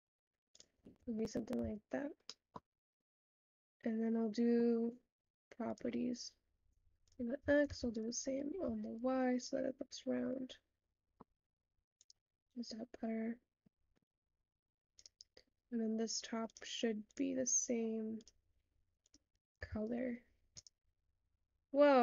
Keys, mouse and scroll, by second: 8.1 click, 9.2 click, 10.5-19.3 middle drag, 19.3 click, 20.6 click.